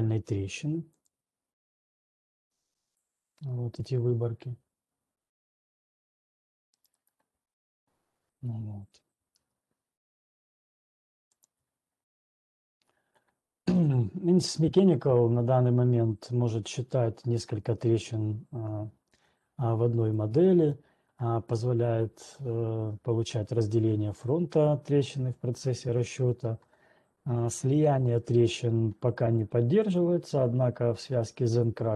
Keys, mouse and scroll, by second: 1.2 click, 3.2 click, 3.7 click, 6.7 right click, 7.5 right click, 9.2 alt+Tab, 12.4 alt+click, 12.4-12.8 scroll, 19.2 scroll, 19.7 ctrl+2, 19.7-20.7 scroll, 20.7 ctrl+2, 20.7 click, 26.2 scroll, 30.2 click.